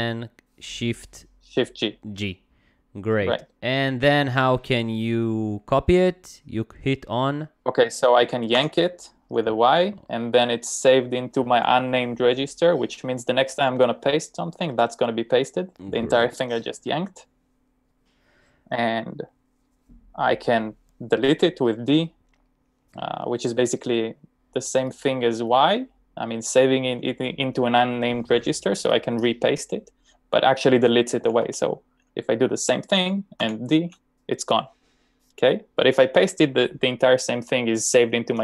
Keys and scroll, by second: 8.6 y, 31.0-31.9 typing, 33.5 d.